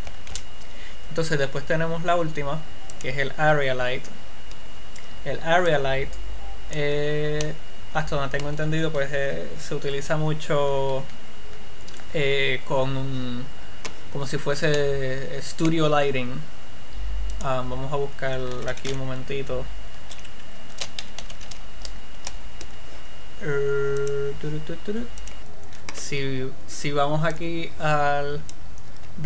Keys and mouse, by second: 0.8 shift+a, 6.2-7.9 drag, 7.9 middle click.